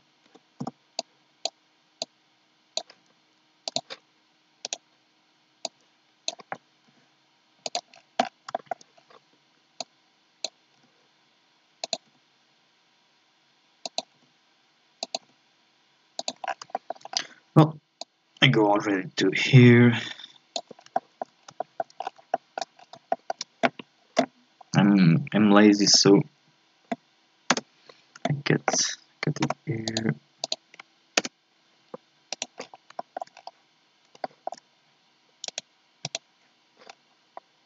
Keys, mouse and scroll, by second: 0.2 a, 0.6 b, 2.0-4.6 drag, 4.6-5.6 right drag, 5.6-6.9 drag, 6.9 e, 7.9-8.5 scroll down 6, 8.5 shift+middle click, 8.9-9.8 scroll up 2, 9.8 click, 10.8 e, 12.1 e, 15.2 e, 16.4 scroll down 1, 16.7 shift+middle click, 17.1-18.0 scroll up 2, 18.0-20.7 drag, 20.7 scroll down 1, 20.9 shift+middle click, 21.3 scroll up 2, 21.6 shift+middle click, 22.0-22.3 scroll up 1, 22.3 shift+middle click, 22.8 scroll up 3, 23.1-24.6 shift+middle drag, 24.6-25.1 scroll down 1, 25.1-25.9 scroll up 2, 27.6 k, 32.3 right click, 32.6 scroll down 2, 33.0 shift+middle click, 33.3 scroll up 1, 34.2 shift+middle click, 34.7-35.5 scroll up 2, 35.5-36.9 right drag, 36.9-37.2 scroll down 1, 37.2 scroll up 2, 37.3 middle click.